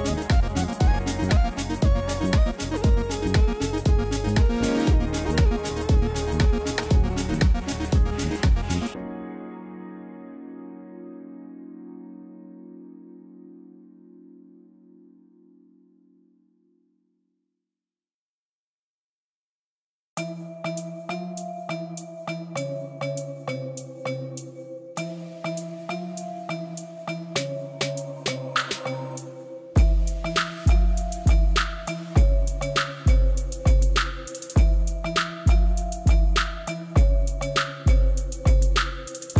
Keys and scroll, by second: 2.8 Tab, 8.9 ctrl+b, 13.3 Tab, 20.0 g, 20.2 z, 22.7 alt+a, 29.5 Tab, 33.3 a, 33.7 u, 35.3 Tab, 36.6 Tab.